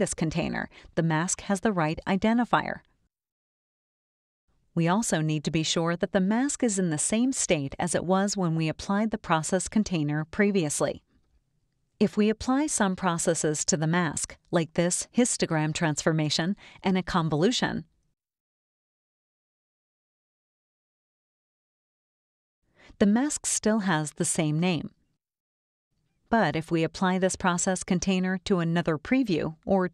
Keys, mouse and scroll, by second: 13.0-14.6 drag, 15.4 click, 17.5-18.5 drag, 19.0 click, 21.4 click, 26.9 click.